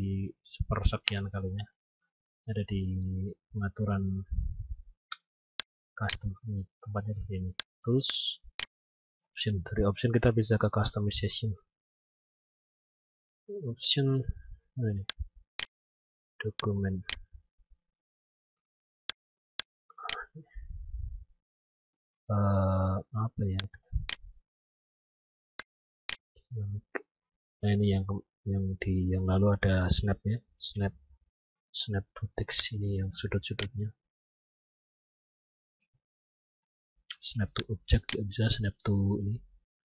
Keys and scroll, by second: 4.9 F9.